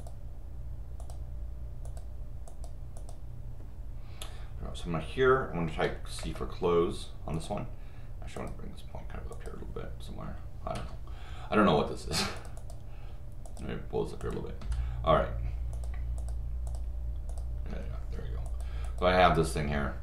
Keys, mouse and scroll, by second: 0.0 click, 1.0 click, 1.8 click, 2.5 click, 5.7 c, 6.2 Return, 7.3 click, 8.4 click, 9.3 click, 10.7 Escape, 12.4 click, 12.6 click, 13.5 click, 14.2 click, 14.6 Escape, 15.7 click, 16.2 click, 16.7 click, 17.3 click, 17.7 Escape, 18.5 click, 18.8 click.